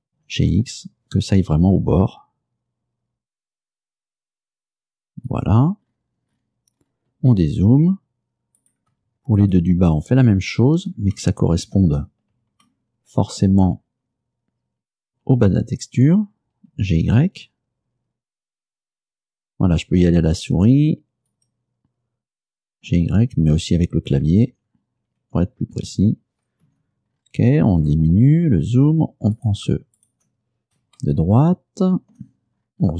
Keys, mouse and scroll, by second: 0.2 g, 0.6 x, 5.4 click, 5.9-7.3 scroll down 6, 7.6-7.9 scroll down 2, 8.7 right click, 10.1-10.8 shift+scroll up 5, 11.2 shift+middle click, 12.7-13.8 shift+middle drag, 13.8-14.8 shift+scroll up 5, 16.8 g, 17.1 y, 21.4 click, 22.7-23.7 typing, 24.2 Down, 25.3 Up, 25.8 Down, 26.7 Return, 27.2-28.0 scroll down 4, 28.4 scroll down 2, 29.4 right click, 30.1 shift+right click, 31.1-32.4 shift+middle drag, 32.6-32.9 shift+scroll up 3.